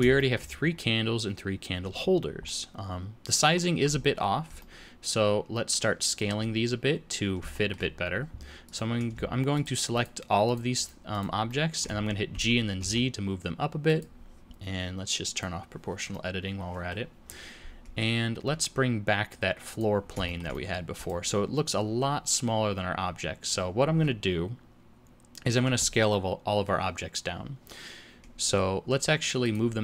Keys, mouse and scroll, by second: 0.2 shift+middle click, 0.6-1.0 scroll down 1, 2.5 middle click, 4.6 middle click, 7.5 shift+middle click, 8.7 click, 9.5 shift+click, 10.0 shift+click, 10.5 shift+click, 10.8 click, 11.1 shift+click, 11.5 shift+middle click, 12.3 g, 15.3 click, 16.1 middle click, 19.7 click, 20.3 shift+middle click, 20.5 middle click, 21.0 click, 29.4 click.